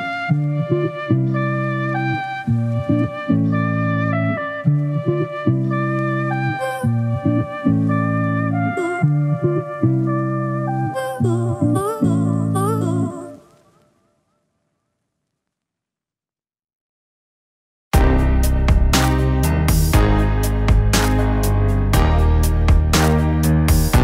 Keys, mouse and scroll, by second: 0.0 middle click, 1.1 middle click, 3.9 middle click, 9.9 middle click, 10.7 middle click, 11.0 middle click, 11.9 middle click, 12.8 middle click, 19.0 middle click, 19.6 middle click, 20.9 middle click, 22.6 middle click.